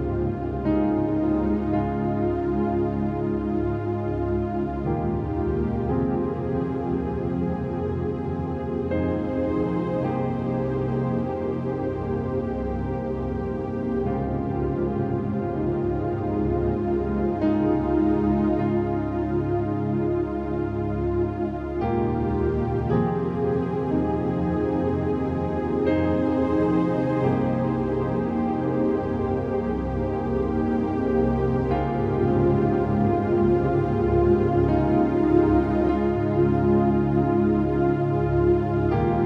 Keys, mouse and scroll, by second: 0.8 scroll up 1, 1.0 space, 1.0 click, 1.2 space, 2.3 click, 2.3-3.9 typing, 2.3 click, 4.6 click, 6.3-8.2 typing, 8.8-11.9 drag, 11.9-17.9 alt+shift+drag, 20.7-24.2 typing, 23.8 click, 25.5-26.8 typing, 27.4 click, 28.6-29.7 typing, 29.8 click, 30.8-37.1 typing, 33.1 click, 35.2 click, 37.5 shift+click.